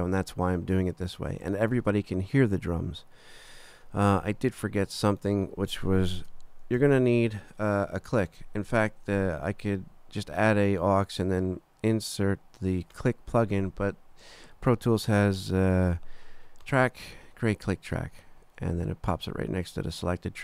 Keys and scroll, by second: 6.8 shift+super+n.